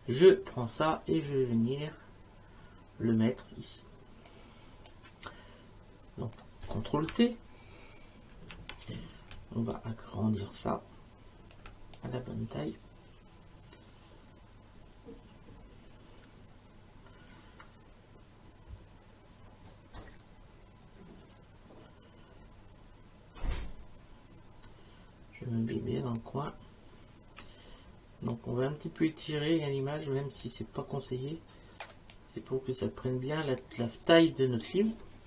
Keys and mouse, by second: 4.9 click, 8.3 ctrl+t, 9.7 shift+click, 12.0 click, 28.3 click, 32.1 click.